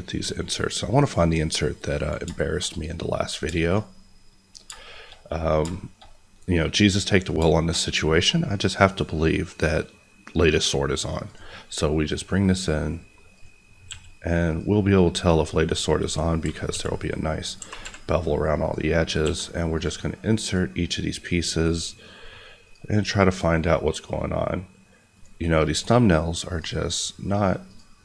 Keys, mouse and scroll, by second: 0.8 click, 2.0 scroll down 2, 2.3 shift+middle click, 2.8-3.2 scroll up 1, 3.2 click, 3.5-4.1 shift+scroll up 2, 4.1 middle click, 4.4-4.8 scroll up 2, 4.8 shift+middle click, 5.6 shift+scroll up 1, 5.7 shift+middle click, 11.2 click, 13.8 s, 14.4 click, 15.0 scroll up 1, 15.8 scroll down 1, 16.4 g, 17.4 click, 17.5 g, 17.8 y, 18.6 click, 19.2 s, 19.7 click, 20.1-20.4 scroll down 1, 20.4 click.